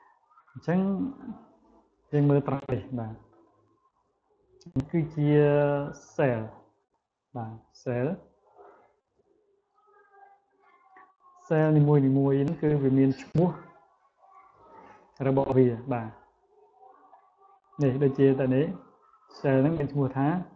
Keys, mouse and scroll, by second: 0.8 click, 1.8 click, 2.4 click, 3.2 click, 4.0 click, 4.5 click, 5.8 click, 6.2 click, 6.6 click, 7.1 click, 7.8 click, 8.6 click, 9.0 click, 9.4 click, 9.9 click, 10.3 click, 10.9 click, 11.4 click, 11.8 click, 12.6 click, 13.2 click, 15.0 click, 16.1 click, 16.8 click.